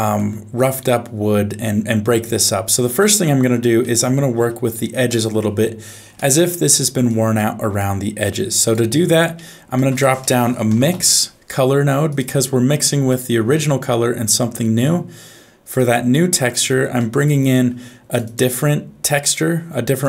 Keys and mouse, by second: 3.0 shift+middle click, 3.8 middle click, 6.2 middle click, 7.1 click, 7.7-8.7 drag, 9.4 middle click, 9.8 shift+a, 16.9 middle click.